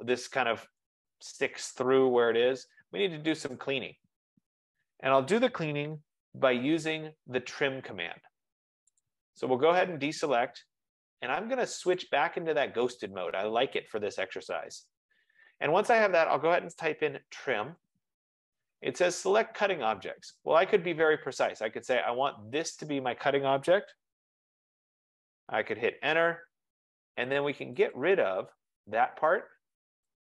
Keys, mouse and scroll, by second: 2.5 scroll down 10, 3.5 right click, 3.7 scroll down 5, 3.9 scroll, 4.5 scroll, 4.8 F15, 4.8 scroll down 5, 6.1-6.8 scroll up 3, 7.1-7.8 scroll up 3, 8.3 scroll up 2, 9.0 click, 9.5 scroll, 12.1 click, 13.5 click, 17.0-18.1 typing, 22.8 click, 23.8 click, 26.1 Return, 28.0 click.